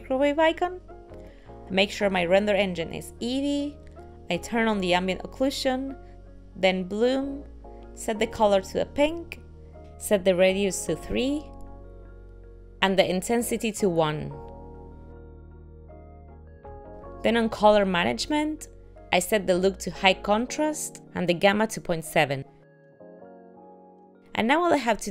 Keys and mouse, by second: 4.8 click, 6.6 click, 7.0 click, 8.0 click, 10.9 click, 13.6 click, 16.9 click, 17.0 click, 19.6 click, 21.8 click.